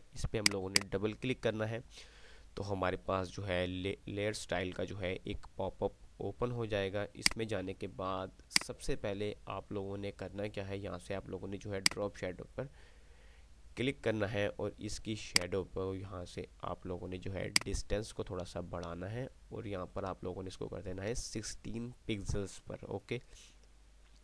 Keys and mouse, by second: 7.5-8.4 drag, 15.5-20.4 drag.